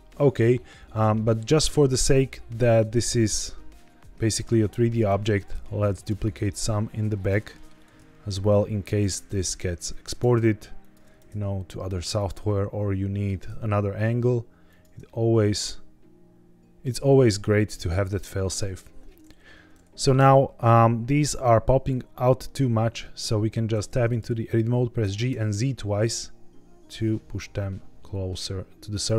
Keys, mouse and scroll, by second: 1.4-3.3 middle drag, 3.4-4.5 scroll down 1, 4.7-5.0 middle drag, 5.3 alt+d, 5.9 ctrl+click, 6.3 alt+d, 7.1 ctrl+click, 7.4 middle click, 7.6 scroll up 1, 7.8 alt+d, 8.8 ctrl+click, 9.1 alt+d, 9.8 ctrl+click, 10.1 alt+d, 10.7 ctrl+click, 11.1 alt+d, 12.1 ctrl+click, 12.4 middle click, 13.3 alt+d, 14.6 ctrl+click, 15.0-16.7 middle drag, 17.4-17.8 middle drag, 18.0 middle click, 20.1 KP_1, 20.9 scroll up 1, 23.6 Tab, 24.9 g, 25.2 z, 25.4 z, 28.8 click.